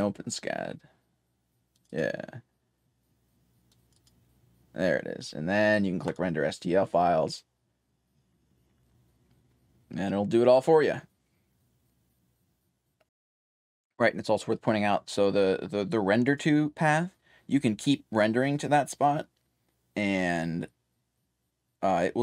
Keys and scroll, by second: 3.7-5.1 typing, 14.2 1, 16.5-19.3 typing.